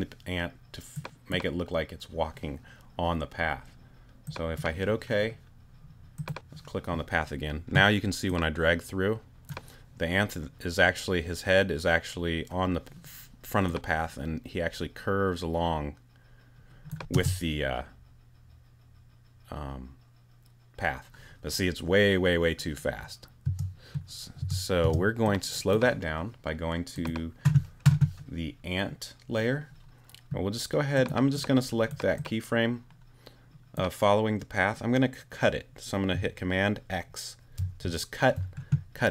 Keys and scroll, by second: 17.1 space, 23.4 space, 37.6 super+x.